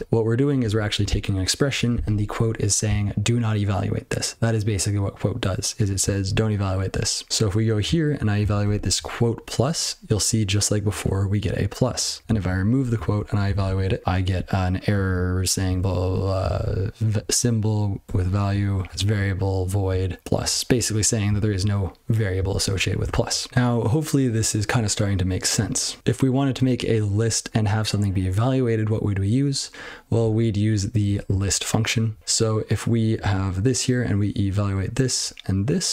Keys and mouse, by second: 30.2-31.0 ctrl+f, 31.1 ctrl+n, 31.2 ctrl+f, 31.4 ctrl+f, 32.1 ctrl+n, 32.2 ctrl+n, 32.9 ctrl+p, 33.1 ctrl+n, 35.1 ctrl+n.